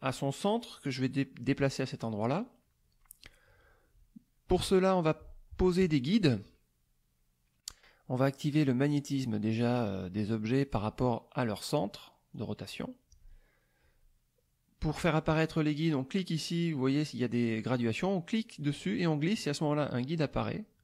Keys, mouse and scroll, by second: 12.3 click, 18.3-20.8 drag.